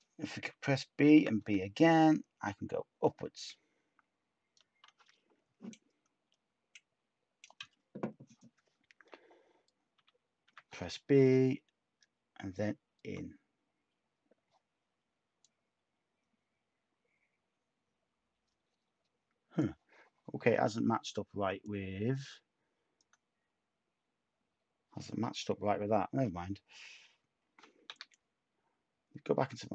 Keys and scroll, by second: 0.4-1.1 typing, 9.9 b, 10.4 b, 27.8 d.